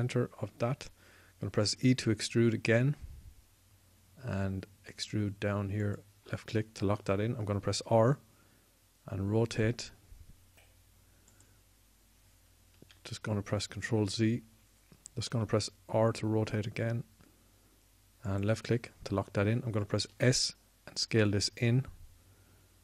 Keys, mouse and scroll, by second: 2.6 e, 8.3 r, 13.7 ctrl+z, 16.1 r, 20.9 s.